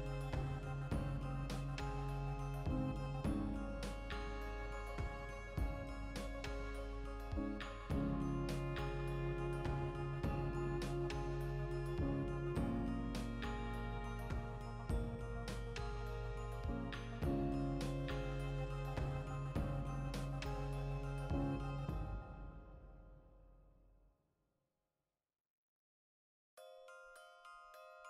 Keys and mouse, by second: 0.0 click, 0.2 g, 1.0 click, 1.5 shift+middle click, 1.8 right click, 2.6-5.1 middle drag, 3.1 alt+q, 4.4 s, 5.1 click, 5.2 g, 5.6 click, 6.2 e, 7.8 click, 8.5 z, 8.7-11.3 middle drag, 9.1 z, 11.0 g, 11.3 right click, 11.4-12.9 middle drag, 12.3 ctrl+l, 12.9 h, 13.6 right click, 13.8-16.1 middle drag, 14.2 f, 15.5 alt+h, 16.1 click, 16.4 ctrl+middle click, 17.0 right click, 17.4 l, 17.9 middle click, 18.8-19.8 drag, 19.8 ctrl+middle click, 20.6 1, 20.7 right click, 20.9 ctrl+middle click, 21.4 v, 21.6 right click, 21.7-22.8 ctrl+middle drag, 22.6 3, 22.8 right click, 23.2 x, 23.8 1, 23.9 right click, 24.1-25.4 middle drag, 25.0 g, 25.4 click, 25.5 middle click, 26.0 2, 26.2 right click, 26.6 f, 26.8-28.0 shift+middle drag, 28.0 right click.